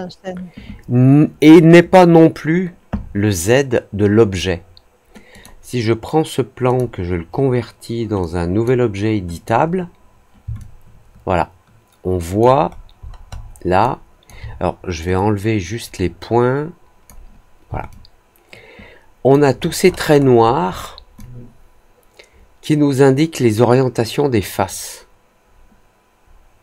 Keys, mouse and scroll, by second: 5.3 click, 6.6 click, 8.1 click, 9.3 click, 10.5-12.3 alt+drag, 12.6 alt+middle click, 12.8-13.4 alt+scroll down 2, 13.4 alt+middle click, 13.7 alt+click, 15.1-17.0 drag, 17.8-19.2 alt+drag, 19.5-20.7 alt+scroll up 4, 20.7 alt+middle click, 21.1-26.6 alt+drag.